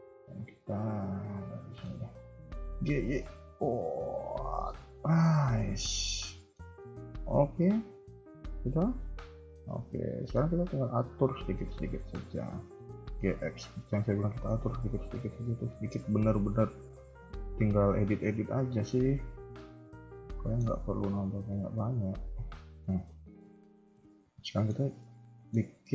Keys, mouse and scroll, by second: 0.3 KP_1, 0.8 scroll down 1, 1.2 middle click, 2.6 g, 4.9 KP_1, 5.3 scroll down 2, 5.4 KP_3, 5.8 middle click, 6.7 KP_1, 7.0-7.9 scroll up 2, 7.9 Tab, 8.3 KP_3, 8.6 KP_1, 9.1 Tab, 9.8 scroll up 1, 10.2 shift+middle click, 10.4 scroll up 1, 10.9 click, 11.4-11.8 scroll down 2, 12.0 shift+middle click, 12.9 g, 15.1 click, 15.5 g, 17.8 click, 18.1 g, 20.3 shift+middle click, 20.6 scroll up 2, 21.5 middle click, 22.7 scroll down 1, 23.1 shift+middle click, 23.3 middle click, 24.8 scroll up 1, 24.9 middle click, 25.6 KP_1.